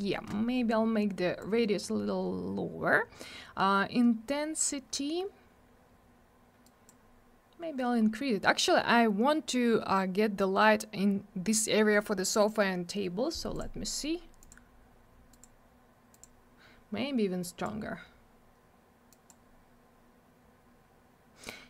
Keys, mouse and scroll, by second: 1.4 click, 6.7 click, 8.0-9.5 scroll down 1, 13.6 click, 13.6 click, 14.4 click, 14.5 click, 15.3 click, 15.4 click, 16.1 click, 16.2 click, 17.4 click, 19.1 click, 19.3 click.